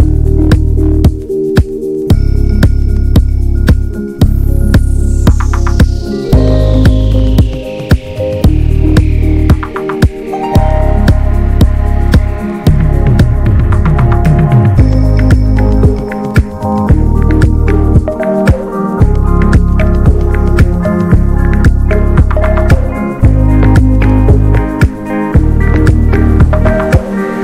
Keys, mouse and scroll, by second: 2.2 s, 3.6 click, 4.3 s, 5.3 Tab, 5.4 click, 5.8 alt+z, 6.0 alt+middle click, 6.4 Tab, 6.7 alt+z, 7.0 click, 7.5 s, 8.2 Tab, 8.3 click, 8.6 ctrl+s, 9.1 ctrl+s, 9.3 Tab, 9.5 alt+z, 9.8 click, 10.3 middle click, 10.5 alt+z, 10.9 alt+z, 11.2 e, 11.6 middle click, 11.7 click, 12.3 3, 12.4 click, 13.0 shift+d, 13.5 middle click, 14.8 shift+middle click, 15.2 r, 16.4 s, 18.7 shift+middle click, 18.9-19.2 scroll up 1, 19.2-20.4 drag, 20.4 e, 21.0 ctrl+z, 21.6 r, 22.4 s, 23.0 ctrl+z, 23.1 ctrl+z, 23.9 click, 24.3 scroll down 1, 24.5 s, 26.1 click, 26.8 1, 27.2 s.